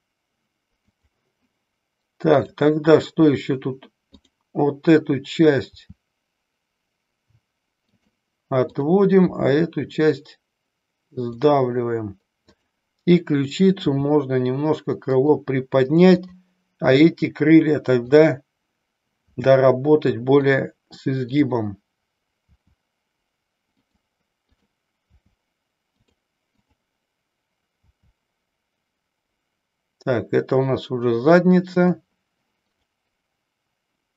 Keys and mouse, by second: 1.0 drag, 2.4 click, 5.8 r, 8.0 click, 8.8 click, 9.3 r, 12.4 click, 14.0 r, 15.2 click, 18.2 click, 19.3 r, 20.5 click, 21.5 click, 22.5 r, 24.7 click, 25.3 r, 26.7 click, 32.8 click.